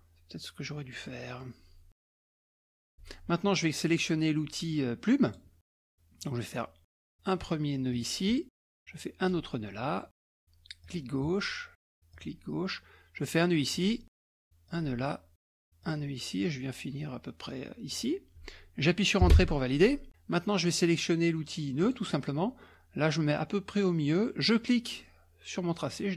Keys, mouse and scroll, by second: 0.9 middle click, 0.9-2.3 scroll down 2, 1.4 middle click, 2.4 ctrl+click, 5.2 click, 7.9 click, 9.2 click, 10.8 click, 12.1 click, 13.7 click, 14.7 click, 15.8 click, 17.9 click, 19.4 Return, 21.8 click, 24.4-26.1 drag.